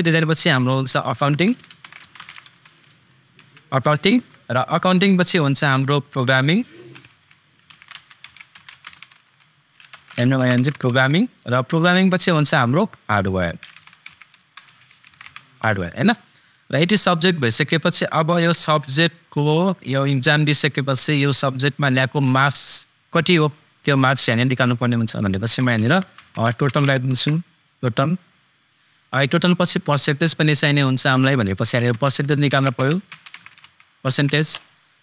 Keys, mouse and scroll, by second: 0.0 super+click, 1.1 a, 1.4 super+c, 1.6 o, 1.8 super+u, 2.0 super+n, 2.1 super+t, 2.2 super+i, 2.2 super+n, 3.4 super+g, 4.1 super+Tab, 6.1 super+click, 7.1 shift+super+p, 7.7 super+o, 7.9 super+g, 8.3 super+a, 8.6 super+m, 8.9 super+n, 9.9 super+BackSpace, 10.3 super+i, 10.4 super+n, 10.6 super+g, 10.9 super+Tab, 12.5 super+click, 13.7 shift+super+h, 13.8 super+a, 14.1 super+r, 14.3 super+d, 14.6 super+w, 14.8 super+a, 15.0 super+r, 15.1 super+e, 18.3 super+Tab, 25.5 super+Tab, 25.9 shift+super+t, 26.1 super+o, 26.4 super+t, 26.5 super+a, 26.7 super+l, 27.0 super+Tab, 31.9 super+Tab, 32.0 shift+super+p, 32.5 super+r, 32.7 super+c, 32.9 super+e, 33.3 super+t, 33.4 super+a, 33.5 super+g, 33.6 super+e, 34.1 super+Tab.